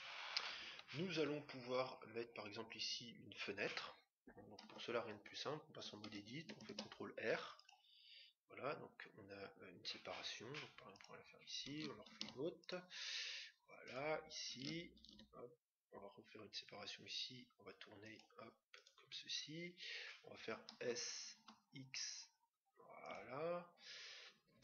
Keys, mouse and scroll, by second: 4.6 Tab, 6.6 ctrl+r, 12.0 ctrl+r, 15.0 ctrl+r, 20.7 s.